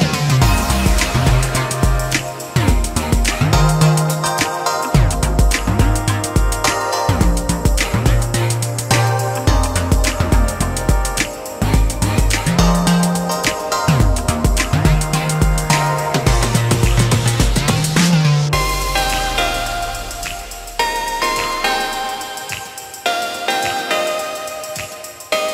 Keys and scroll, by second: 1.1 ctrl+a, 1.7 ctrl+f, 2.9 space, 3.1 Escape, 14.9 space, 21.1 f.